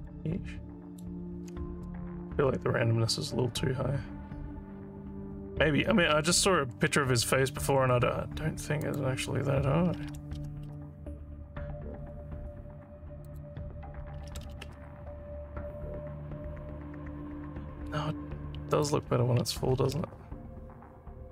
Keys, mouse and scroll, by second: 0.1 alt+middle click, 5.4 scroll up 1, 7.3 scroll up 1, 8.9 click, 13.3 click, 18.8 click.